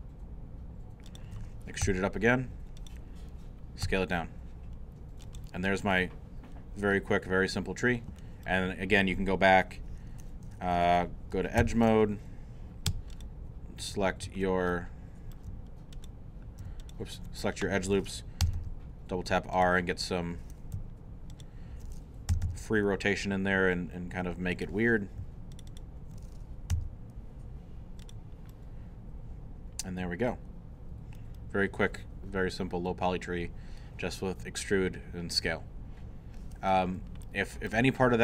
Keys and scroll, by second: 1.8 e, 3.8 s, 11.6 2, 18.4 r, 22.3 alt+r, 26.7 alt+r.